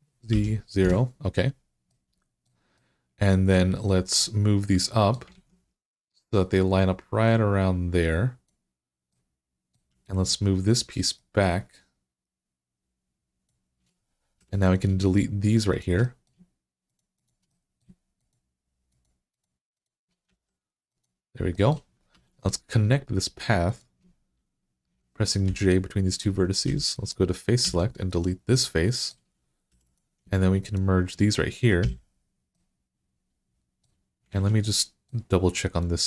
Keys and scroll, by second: 0.0-0.1 typing, 0.7 Return, 5.2 alt+z, 14.2 3, 20.1 x, 22.0 1, 25.3 j, 26.5 3, 27.5 3, 29.5 2, 31.6 f, 34.1 alt+z.